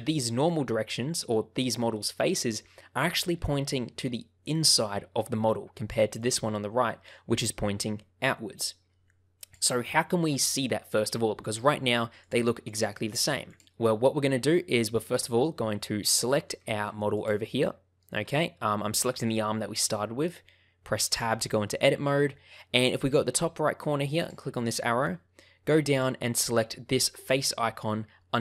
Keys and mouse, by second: 6.1 click, 12.1 click, 12.6 click, 13.4 click, 15.4 shift+middle click, 16.1 shift+middle click, 16.5 middle click, 17.4 shift+middle click, 21.0 Tab, 21.8 middle click, 24.3-28.4 drag.